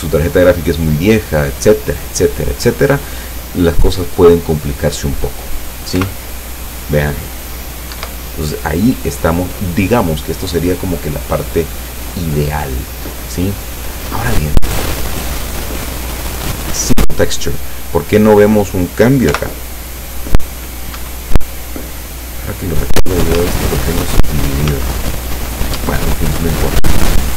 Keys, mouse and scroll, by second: 6.1 p, 8.0 Escape, 15.5 click, 16.4 click, 19.4 p, 21.0 Escape, 22.4 right click, 23.0 right click, 23.5 Tab, 24.8 Tab, 25.6 Tab.